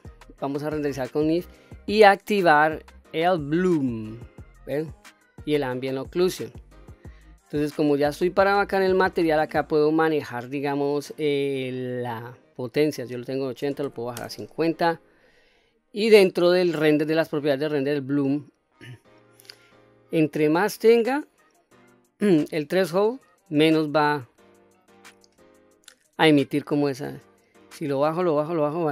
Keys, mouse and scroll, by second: 3.8 click, 5.7 click, 8.1 click, 9.4-10.0 scroll down 2, 10.0-12.9 scroll down 6, 12.9-15.3 drag, 16.6 click, 18.0 click, 20.0-25.0 drag, 26.4-28.9 drag.